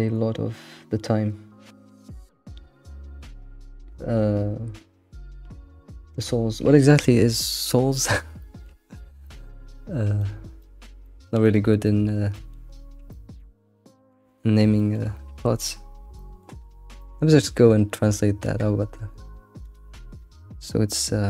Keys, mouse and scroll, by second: 7.1 scroll down 3, 8.4 shift+middle click, 8.9 scroll down 1, 9.2 shift+middle click, 9.9 scroll down 2, 10.2-12.8 shift+middle drag, 12.8-13.1 scroll down 1, 13.1-14.3 shift+middle drag, 14.3-14.8 scroll up 3, 15.1 scroll up 1, 16.2 middle click, 16.7 scroll down 1, 17.0-20.0 middle drag.